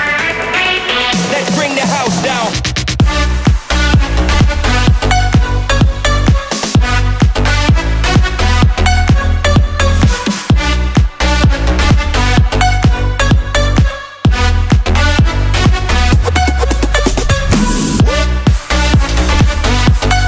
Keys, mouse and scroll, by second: 0.7 click, 1.2 click, 4.1-7.4 drag, 8.1-10.6 drag, 11.5 click.